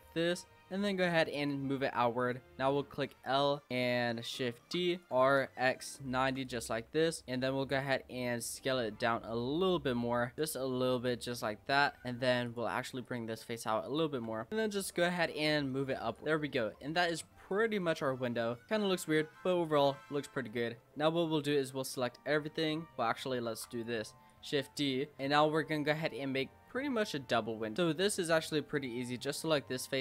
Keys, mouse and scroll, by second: 0.2 e, 2.2 click, 2.9 l, 4.6 shift+d, 5.1 r, 6.8 middle click, 7.2-7.7 scroll up 2, 7.7 s, 11.0 click, 12.4 click, 13.0 click, 13.9 click, 14.3 l, 14.5 middle click, 14.8 click, 16.0 Tab, 16.2 click, 16.2-16.7 scroll down 8, 16.7-17.5 middle drag, 17.5 click, 17.8-18.1 middle drag, 18.1-18.7 scroll up 5, 18.7-19.2 middle drag, 19.2-19.7 scroll up 1, 19.7-20.1 middle drag, 20.1 Tab, 20.3 scroll down 2, 20.5-21.6 middle drag, 21.6 a, 22.5 Tab, 23.5 shift+d, 24.3 click, 25.1 shift+middle click, 25.3 Tab, 25.5 scroll up 3, 25.8 middle click, 26.6-27.8 scroll down 1, 27.8 middle click, 28.1-28.7 scroll up 3, 28.7 click, 29.3 middle click.